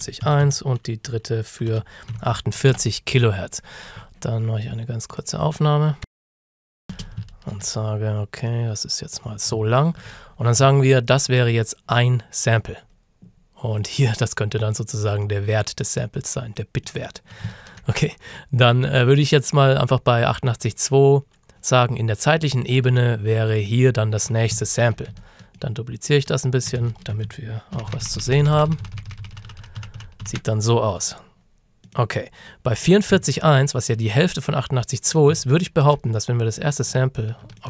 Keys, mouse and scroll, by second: 0.0-2.6 typing, 2.7 Return, 5.1 Return, 5.2 click, 6.1 KP_Multiply, 7.3 ctrl+shift+scroll up 1, 8.5 click, 9.7-10.3 ctrl+scroll up 2, 10.8-11.1 ctrl+shift+scroll down 1, 13.3 scroll up 1, 14.0 click, 23.5 alt+click, 24.7-25.1 ctrl+shift+scroll down 2, 25.6 ctrl+click, 26.9-27.3 ctrl+shift+scroll down 2, 27.8 d, 31.9 click, 33.6-35.3 ctrl+shift+scroll up 3, 35.5 ctrl+scroll up 1, 36.6 click.